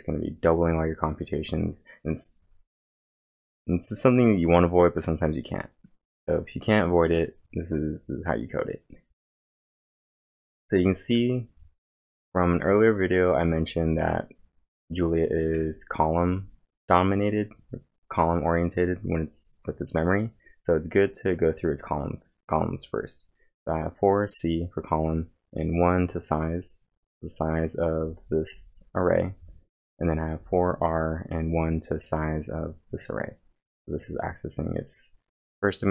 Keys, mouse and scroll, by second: 7.3 click, 7.3-9.4 scroll down 1.